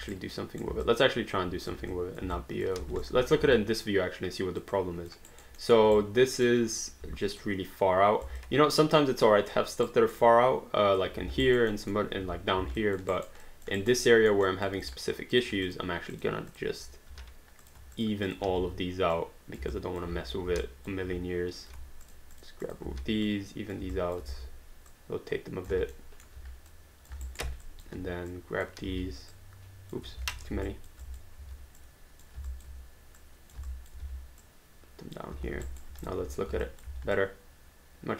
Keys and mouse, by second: 0.1 right click, 0.9 alt+click, 1.4 click, 1.9 click, 2.6 alt+click, 2.8 alt+d, 3.0 click, 3.7 alt+click, 5.1 alt+click, 5.4 alt+right click, 5.6 alt+middle click, 5.9 right click, 6.7 click, 7.0 w, 7.4 click, 8.2 alt+click, 9.2 alt+middle click, 10.1 alt+right click, 10.2 alt+click, 11.4 alt+right click, 11.8 alt+middle click, 12.8 alt+click, 13.1 alt+right click, 13.5 alt+click, 13.8 alt+right click, 14.1 alt+middle click, 14.5 alt+click, 14.8 click, 15.6 shift+click, 17.1 q, 17.6 click, 18.0 shift+click, 18.5 r, 19.2 click, 19.8 alt+click, 20.1 w, 20.7 alt+click, 22.1 shift+click, 22.9 r, 23.3 click, 24.0 alt+click, 24.3 e, 24.9 click, 25.9 alt+middle click, 26.7 click, 27.3 alt+right click, 27.7 alt+click, 28.3 click, 28.9 r, 29.3 click, 30.1 ctrl+z, 30.4 q, 30.7 alt+click, 31.0 click, 32.5 alt+click, 33.2 click, 33.9 alt+click, 34.4 click, 35.5 alt+d, 35.7 alt+right click, 36.0 click, 36.2 d, 36.6 alt+click, 36.9 alt+d, 37.2 alt+click.